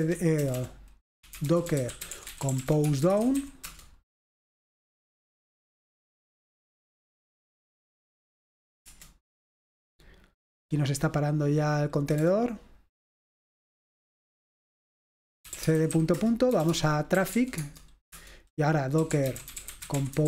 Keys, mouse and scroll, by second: 0.0-4.0 typing, 8.9 Return, 12.3 Return, 15.3-20.2 typing, 18.1 Return.